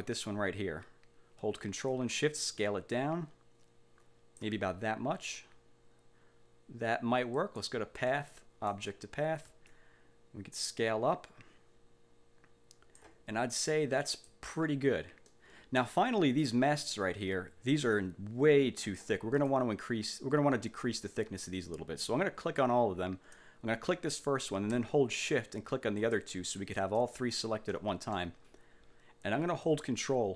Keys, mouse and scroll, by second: 2.0-4.7 ctrl+shift+drag, 7.5 click, 8.2 click, 9.9-13.3 ctrl+shift+drag, 13.7 ctrl+click, 15.4 click, 18.0 click, 19.0 click, 19.5 click, 22.5 click, 26.1 shift+click, 26.7 shift+click, 27.9 middle click.